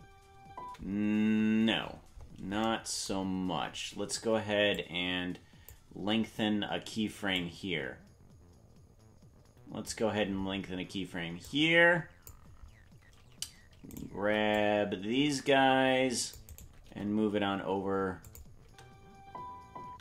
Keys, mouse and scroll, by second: 1.8-2.6 scroll up 1, 1.8 space, 2.6-4.5 scroll up 7, 4.8 click, 7.3 click, 11.4 click, 13.9 right click, 14.2 c, 16.8 g, 18.6 space.